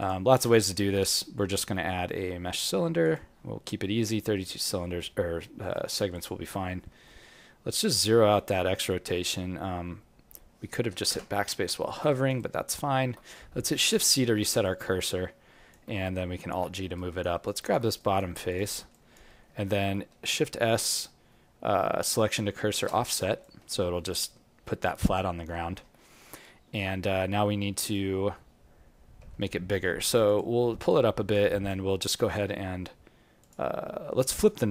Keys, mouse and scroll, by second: 0.8 shift+a, 5.7 alt+right click, 6.1 alt+click, 6.6 alt+middle click, 7.7 click, 12.1 alt+right click, 12.3 alt+click, 12.9 alt+middle click, 13.7 shift+c, 14.2-14.6 scroll down 5, 14.6 alt+click, 16.4 alt+g, 16.9 right click, 17.4 alt+click, 17.9 right click, 18.4 click, 18.9 alt+click, 19.4 alt+middle click, 20.3 shift+s, 25.5 alt+middle click, 27.8 click, 28.2-29.2 scroll down 2, 29.2 g, 30.8 alt+click, 31.4 right click, 33.4 click, 34.1 right click.